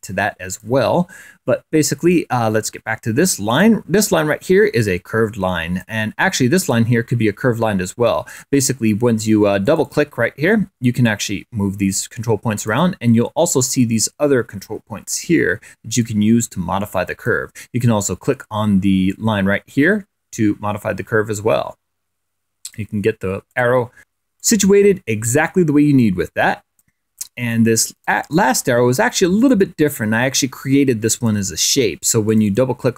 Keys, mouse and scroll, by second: 2.9 click, 5.2-6.5 drag, 7.0 click, 8.7 click, 10.0 click, 11.4-13.3 drag, 16.4-18.1 drag, 19.5-23.4 drag, 24.5 click, 25.8-27.1 drag, 27.4-28.5 drag, 28.9 click, 29.8 click, 30.0 click, 30.4 click, 31.4 click.